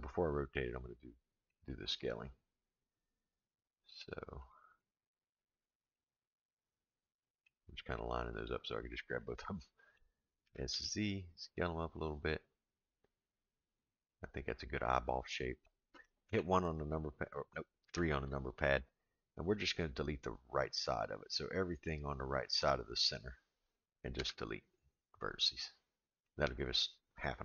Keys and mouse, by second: 0.5 middle click, 1.8-4.0 middle drag, 4.8 click, 5.3 click, 5.9-7.5 middle drag, 8.3 click, 9.2 middle click, 10.4 s, 14.1-15.7 middle drag, 16.2 KP_1, 17.9 KP_3, 21.1-22.6 drag, 24.1 x, 26.2-27.4 middle drag.